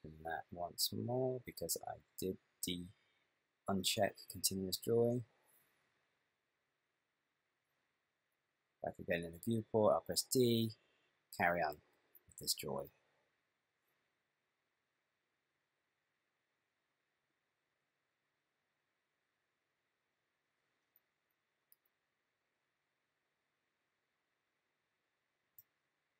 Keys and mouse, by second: 4.9 click, 9.6-10.6 d, 10.7 click, 22.0 ctrl+middle click.